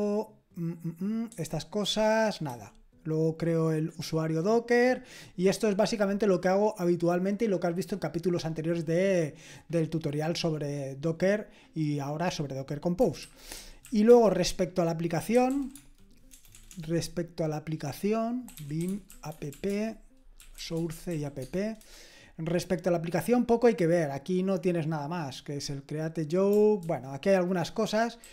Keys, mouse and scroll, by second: 2.5 typing, 13.2-16.5 typing, 18.3-21.6 typing, 21.8 Return, 26.8 ctrl+d, 28.2 ctrl+d.